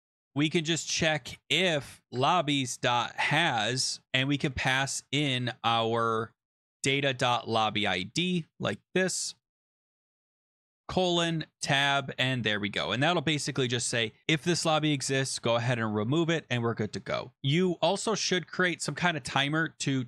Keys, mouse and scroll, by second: 0.1 click, 0.3 Return, 0.9-3.4 typing, 6.3 click, 7.8 click, 8.3 ctrl+c, 9.0 click, 9.3 click, 9.6 ctrl+v, 9.6 click, 9.8 click, 10.0 click, 11.2 click, 11.2 scroll, 11.4 Tab, 12.8 ctrl+s, 17.0 click, 17.4-17.9 scroll, 18.4-20.0 scroll.